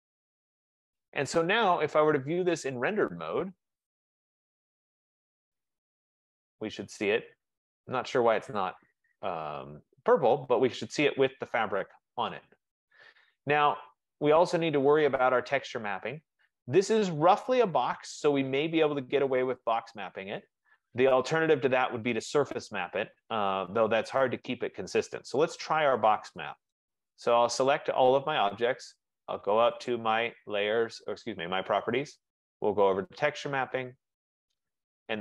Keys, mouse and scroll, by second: 1.7 click, 2.9 click, 4.5 click, 10.3 middle click, 10.8 middle click, 11.5 middle click, 12.0 middle click, 15.2 right click, 15.2-15.9 scroll, 15.9-16.3 scroll, 25.3 middle click, 28.1 click, 30.0 click, 31.4 click, 33.2 click.